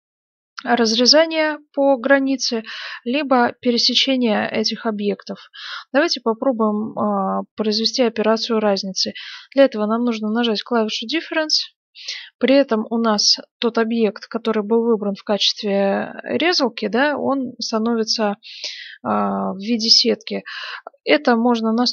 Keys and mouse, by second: 10.8-12.6 drag, 12.6-20.0 middle drag.